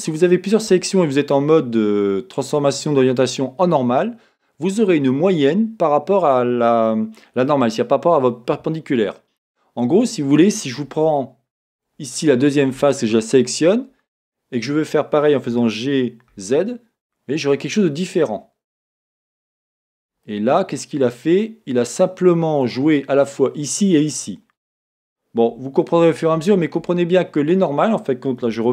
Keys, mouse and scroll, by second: 12.0-12.5 scroll, 12.5-12.9 scroll up 1, 12.9 shift+click, 14.2-15.5 middle drag, 15.5 g, 18.5 middle click, 19.4 click, 19.8 scroll down 1, 20.2-26.0 middle drag, 26.0 z, 27.1-28.7 middle drag, 27.1 s.